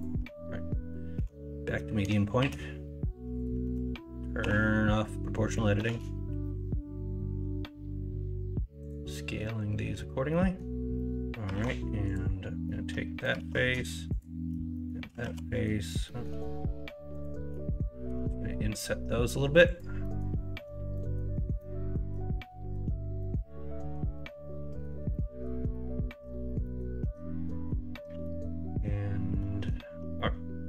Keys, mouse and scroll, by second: 1.1 s, 3.6 ctrl+z, 4.4 o, 5.7 s, 10.3 middle click, 10.3-11.1 scroll up 2, 10.9 middle click, 11.5 alt+z, 12.6 middle click, 13.4 alt+z, 14.7 middle click, 15.2 ctrl+z, 15.4 middle click, 16.0 middle click, 17.5 middle click, 18.0 i, 20.1 middle click, 20.9 middle click, 21.6 middle click, 22.5 middle click, 23.1-24.8 middle drag, 25.1 middle click, 25.8 middle click, 26.6 middle click, 27.0 Tab, 27.5 middle drag, 28.2 middle drag, 29.4 middle click, 30.1 middle click.